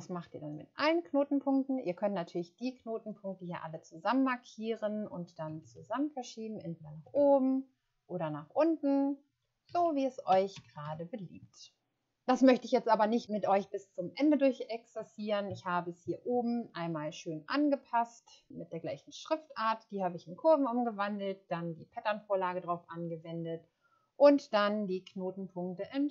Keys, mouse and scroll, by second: 5.4-5.8 scroll up 3, 9.6 Down, 9.8 Down, 9.9 Down, 10.2 Down, 10.5 Down, 10.8 Down, 15.1 scroll up 1, 19.0 scroll up 1.